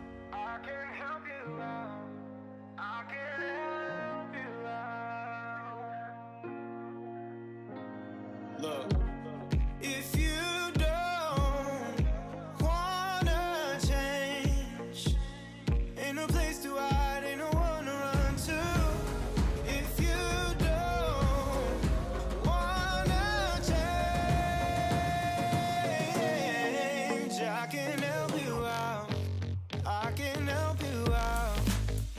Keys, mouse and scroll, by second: 0.2 g, 2.3 click, 2.7-4.1 shift+middle drag, 4.1 Escape, 4.5 ctrl+l, 5.8 click, 7.0 g, 9.2 click, 10.6 middle click, 11.3 shift+s, 11.8 Tab, 12.2 click, 12.4 Tab, 12.7 click, 13.3 ctrl+l, 13.5 p, 14.0 Tab, 14.2 click, 15.1-16.5 drag, 16.7-19.3 right drag, 19.3-20.6 scroll down 2, 20.6 click, 21.4 click, 21.6 click, 22.2 KP_3, 22.7 Tab, 22.9-23.3 scroll up 2, 23.5 click, 24.0 shift+middle click, 24.4 g, 27.0 scroll down 4, 27.2 alt+z, 27.4-28.5 middle drag, 28.5 g, 29.6 click, 29.8 scroll down 2, 30.0 middle click, 30.3-30.8 scroll up 6, 30.8-32.1 middle drag.